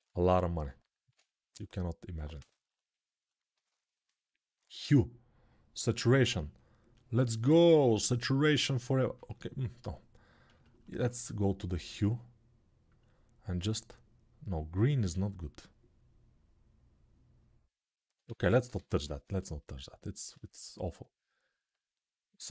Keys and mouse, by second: 18.0 ctrl+z, 18.3 ctrl+z, 21.9 right click.